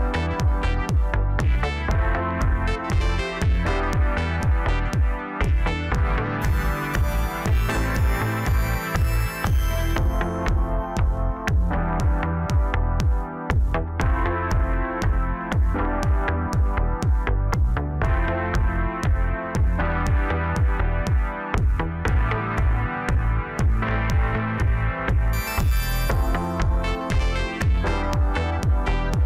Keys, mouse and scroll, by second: 0.3 click, 1.4 shift+click, 2.3 j, 3.1-4.6 middle drag, 4.6 click, 5.7 shift+click, 6.6 j, 7.2-8.9 scroll down 1, 8.9 click, 9.7 click, 9.8 click, 11.1 KP_1, 11.9-12.8 scroll up 1, 12.8 ctrl+b, 15.6-17.1 middle drag, 17.1-17.8 scroll down 2, 17.8 KP_1, 19.5 ctrl+r, 22.2 s, 26.4-26.9 scroll up 2, 26.9-28.2 middle drag, 28.2-28.9 scroll down 1, 28.9 KP_1.